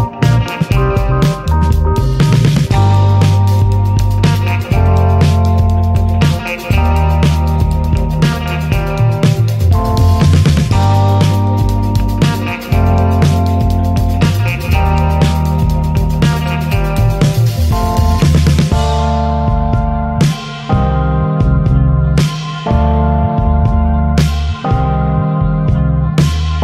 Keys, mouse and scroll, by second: 1.8 click, 2.1-4.0 middle drag, 4.0 click, 4.4-5.2 middle drag, 5.4-6.7 middle drag, 6.7 click, 7.1 Delete, 7.2 click, 7.5 middle drag, 7.7 click, 8.2 ctrl+s, 8.6 click, 9.4 alt+middle click, 9.8-10.4 scroll up 3, 10.0 shift+middle drag, 11.5-13.3 drag, 13.3 scroll down 1, 13.5 middle click, 13.8 scroll up 1, 13.8 click, 14.5 shift+a, 14.7 middle click, 15.0 s, 15.9 click, 16.1 middle click, 16.4 s, 17.6 click, 17.8 middle click, 18.1 Tab, 18.3 shift+middle click, 18.6 3, 19.0 click, 19.4 2, 19.7 click, 20.4 shift+middle click, 20.9 e, 22.0 t, 22.7 click, 24.4 middle click, 24.6 scroll up 1, 24.9 click, 25.1 middle click, 25.6 ctrl+b.